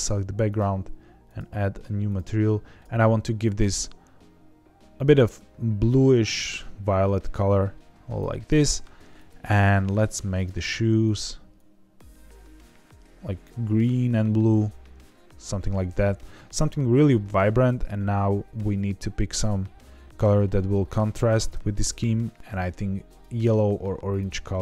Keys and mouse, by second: 0.4 click, 1.2 click, 2.0 click, 2.8 ctrl+z, 2.8 click, 10.3 click, 11.0 click, 23.1 click, 24.0 click.